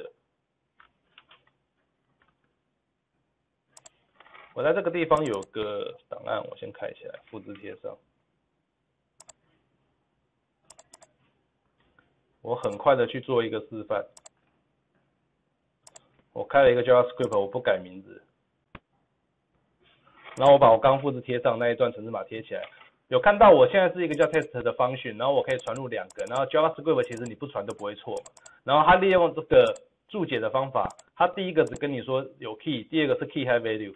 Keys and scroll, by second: 21.2 ctrl+v.